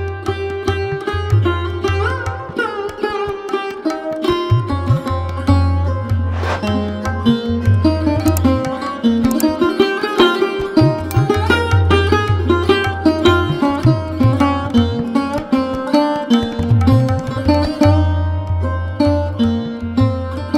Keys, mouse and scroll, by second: 0.6 click, 1.0 click, 2.1 click, 2.9 Tab, 3.2 click, 3.4-4.4 middle drag, 4.4-5.0 scroll up 1, 5.0 Tab, 5.3 click, 5.6 shift+click, 6.4 click, 6.9 click, 7.2-7.6 scroll down 2, 7.6 scroll up 2, 7.9 middle click, 8.7-9.2 scroll down 3, 9.2 KP_1, 9.6 click, 10.7 shift+z, 11.1 click, 11.7 shift+z, 12.2 click, 12.7 click, 13.2-14.3 scroll down 2, 14.3 Tab, 14.7 scroll up 1, 14.9-15.5 middle drag, 15.5-15.9 scroll up 1, 15.9-16.6 shift+middle drag, 16.1-17.0 scroll down 3, 17.0-17.3 middle drag, 17.3-17.7 scroll up 1, 17.7 KP_1.